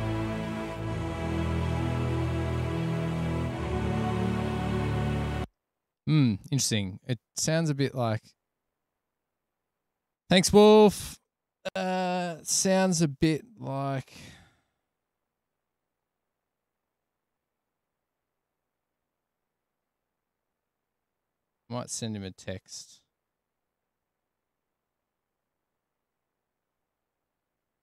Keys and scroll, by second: 5.6 space.